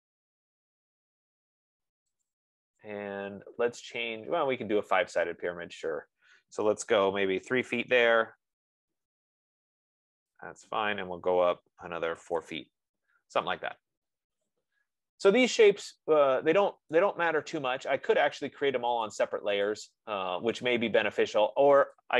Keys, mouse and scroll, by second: 2.7 click, 7.7-8.5 typing, 10.7-15.8 drag, 12.6 typing, 12.8 Return, 17.2 right click, 18.7 click, 19.5 click, 20.0 click, 20.9 click.